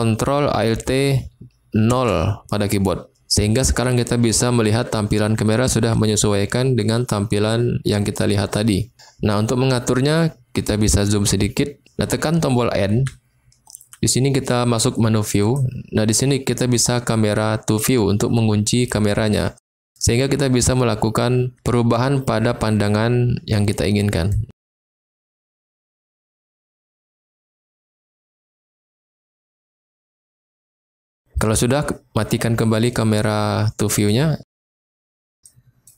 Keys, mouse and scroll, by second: 1.9 ctrl+alt+KP_0, 13.0 n, 15.4 click, 17.8 click, 20.2-26.4 middle drag, 28.2 shift+middle click, 29.1 middle click, 30.0 shift+middle click, 30.8 middle click, 33.9 click, 35.4 middle click.